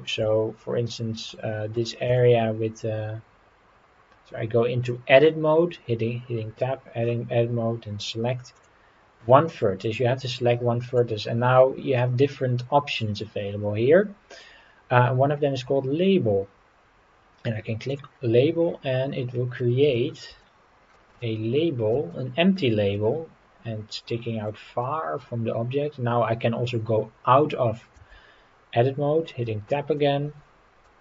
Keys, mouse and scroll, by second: 0.3 scroll up 2, 1.3-1.8 middle drag, 4.8 Tab, 7.5-8.1 scroll up 4, 8.5 click, 10.2 middle click, 17.9 click, 18.6-19.7 scroll down 7, 19.9 shift+middle click, 20.4 middle click, 21.2 shift+middle click, 22.1 middle click, 24.5 scroll down 1, 24.8 middle click, 25.4 scroll up 3, 29.5 Tab, 30.0-30.8 middle drag.